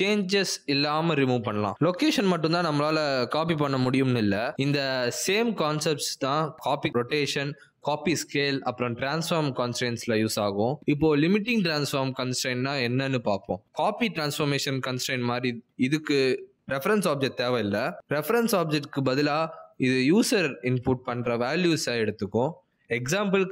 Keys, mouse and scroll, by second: 5.0 click, 6.4 middle click, 7.6 click, 20.4 click, 21.7 click.